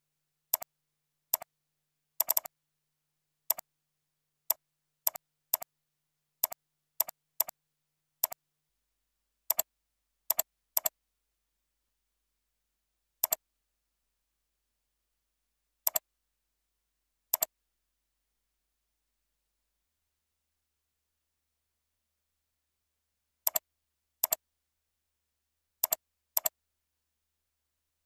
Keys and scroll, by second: 3.7 ctrl+shift+., 7.3 ctrl+shift+,, 11.8 ctrl+Return.